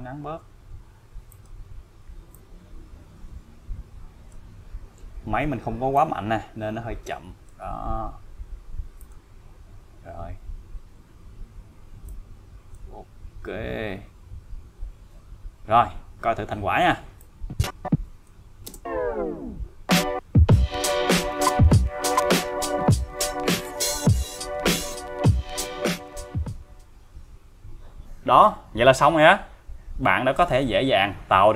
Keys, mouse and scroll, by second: 1.3 click, 2.3-4.5 click, 5.9-7.5 click, 8.0-8.6 scroll down 1, 9.0 click, 9.9-10.5 scroll down 1, 12.1-13.0 click, 14.4-14.9 scroll up 1, 17.2-18.4 click, 18.7 space, 28.0 space.